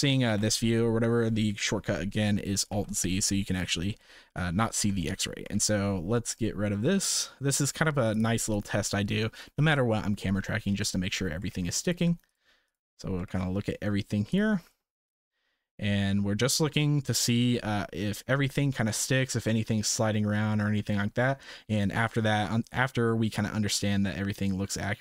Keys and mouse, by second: 0.2 alt+z, 2.7 alt+z, 5.0 shift+middle click, 5.5 ctrl+s, 7.5-8.6 right drag, 10.8-11.2 shift+middle drag, 11.5 ctrl+s, 11.8 click, 12.6 shift+middle click, 13.3 ctrl+s, 14.3 middle click, 14.7 space.